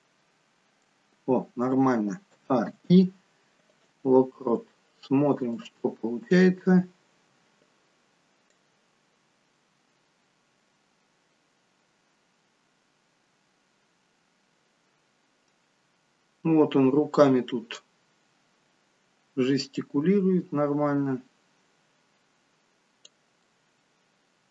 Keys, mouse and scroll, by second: 1.3 scroll down 1, 2.5 a, 2.8 i, 5.7 click, 6.1-7.2 scroll down 8, 8.8 click, 18.3-20.0 scroll up 2, 20.0 click, 20.0-20.7 scroll up 3, 23.6 middle click.